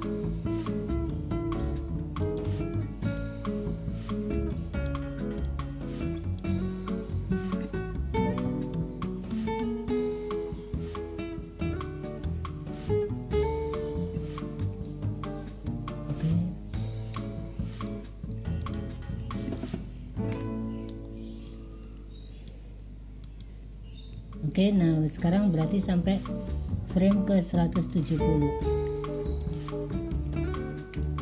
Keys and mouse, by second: 2.3 click, 3.2-4.2 drag, 4.8 click, 5.5-6.5 drag, 8.2-16.0 drag, 17.2 i, 18.7 click, 19.6 click, 21.5 Delete, 21.5-22.6 drag, 23.3 click, 23.5 space, 25.3 click, 28.0 click, 29.6-31.2 drag.